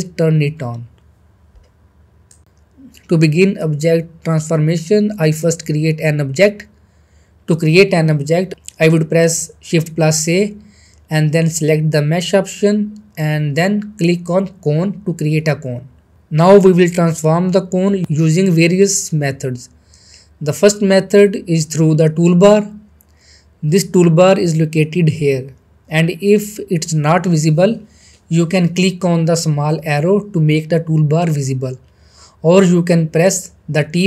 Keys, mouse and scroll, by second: 3.2-9.5 middle drag, 10.5 shift+a, 14.7 shift+a, 14.8 click, 15.2-15.8 middle drag, 18.7-19.3 middle drag, 19.9 click, 29.3 t, 29.4 click, 32.7 click.